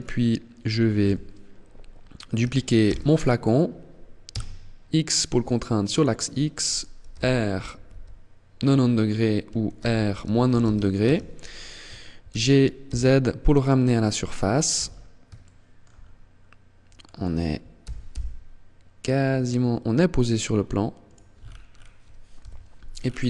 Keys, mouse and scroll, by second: 0.1 KP_1, 2.1 shift+d, 6.2 click, 6.2 r, 8.9 r, 11.5 g, 13.7 click, 13.9-14.5 scroll up 5, 14.5 shift+middle click, 15.1 scroll up 2, 15.9-16.3 scroll up 2, 16.9 g, 20.3 click, 20.5-21.5 scroll down 8, 21.5 scroll down 1, 21.5 KP_7, 22.0 scroll down 2, 22.9 right click.